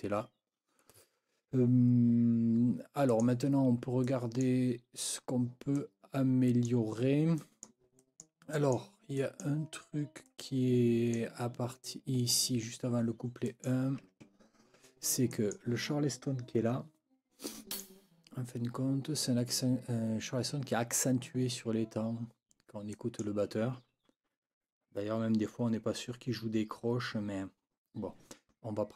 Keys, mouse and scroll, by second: 3.1 click, 4.0 click, 4.1-4.6 scroll up 4, 4.3 click, 5.7-6.9 drag, 7.4 click, 8.0-9.6 scroll up 6, 10.3 scroll up 2, 14.4 ctrl+scroll up 2, 15.3 click, 17.7 click, 22.9 click.